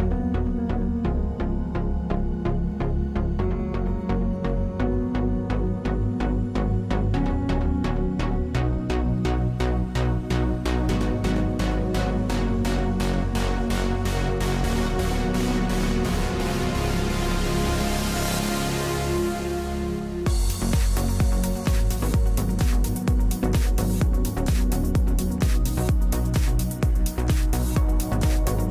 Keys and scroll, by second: 2.9 0, 3.3 Return, 7.0 space, 8.6 space, 21.0 space, 21.9 space.